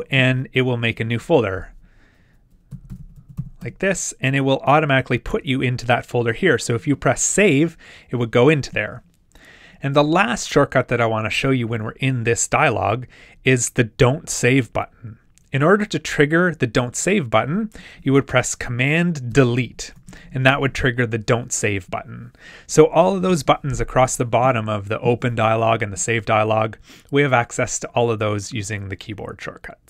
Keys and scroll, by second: 19.3 super+BackSpace, 25.4 super+BackSpace.